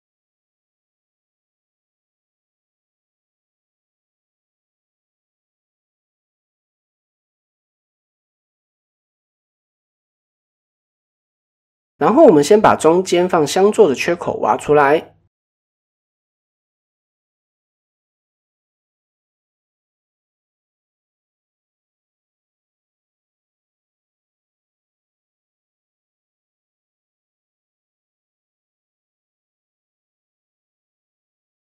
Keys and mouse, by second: 1.1 click, 3.3 right click, 3.9 KP_1, 4.9 shift+middle click, 6.0 click, 6.3 shift+middle drag, 6.8 Tab, 7.1 middle drag, 8.2-9.3 drag, 9.8 drag, 11.5 shift+a, 13.6 Tab, 14.0-14.7 drag, 15.6 click, 16.2-16.7 drag, 17.2 click, 17.8 s, 18.8 click, 19.7-21.1 drag, 22.0 click, 22.3 s, 23.7 middle click, 24.4 a, 24.7 s, 26.2 Tab, 26.3 middle click, 27.7 click, 27.9 middle click, 30.4 click, 31.4 click.